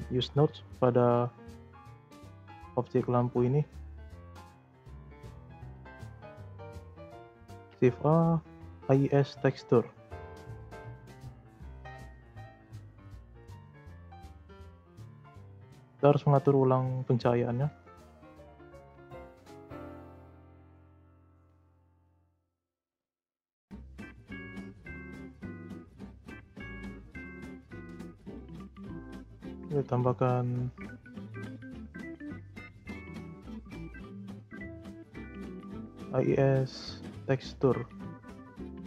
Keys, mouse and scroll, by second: 0.3-2.3 scroll up 22, 1.4 middle click, 2.3 click, 2.7 click, 3.3 z, 4.5 scroll up 3, 4.8 middle click, 5.2-6.1 scroll up 5, 6.1-7.1 middle drag, 7.1 click, 7.4 shift+a, 11.8 click, 12.6 middle click, 13.0-15.3 scroll up 1, 15.3 click, 17.9-19.0 drag, 19.0 0, 21.6-22.2 middle drag, 22.2 scroll up 1, 22.4-23.3 shift+middle drag, 23.3-24.0 scroll down 2, 24.0-26.5 scroll up 5, 26.5-27.1 drag, 27.3 click, 27.8-30.9 drag.